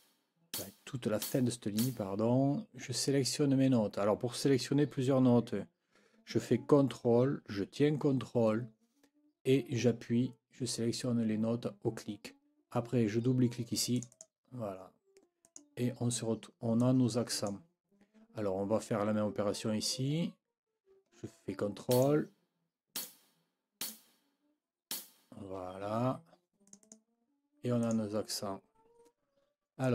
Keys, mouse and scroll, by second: 0.5 ctrl+click, 1.2 ctrl+click, 1.8 ctrl+click, 14.0 middle click, 14.0-14.4 scroll, 14.4-15.4 drag, 15.4 middle click, 15.4 scroll, 16.8 middle click, 16.8-17.4 scroll, 17.3 middle click, 21.9 ctrl+click, 23.0 ctrl+click, 23.8 ctrl+scroll up 1, 24.9 ctrl+scroll up 1, 26.7-27.1 scroll up 1, 27.8 scroll up 1, 29.8 scroll up 1.